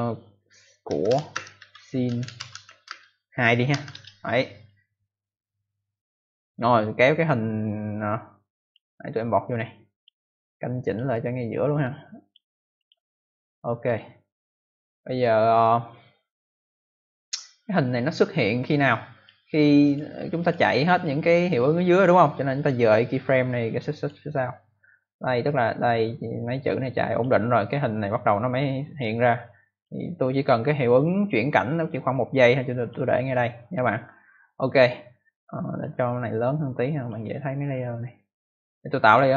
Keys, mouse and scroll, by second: 0.5-3.6 typing, 3.8 Return, 5.4 click, 7.8 click, 9.5 click, 10.7 click, 10.9 click, 12.1 click, 12.7 click, 13.8 click, 15.9 click, 19.8 click, 19.9 click, 20.3 click, 20.4 click, 20.9 click, 24.9 click, 28.0 click, 29.7 click, 30.4 click, 35.6 click, 36.9 click, 39.0 click.